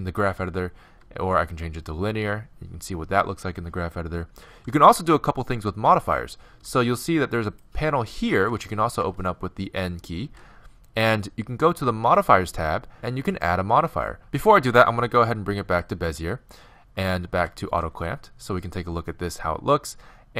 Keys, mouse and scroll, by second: 0.9 t, 7.5-9.2 drag, 9.0 n, 10.3 n, 12.2-14.1 drag, 14.1 t, 15.2 t, 17.3 v.